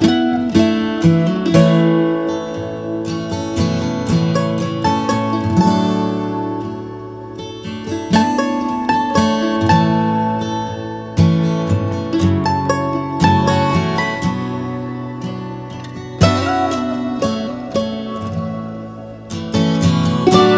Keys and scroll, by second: 4.3 Up, 4.3 Down, 4.9 Down.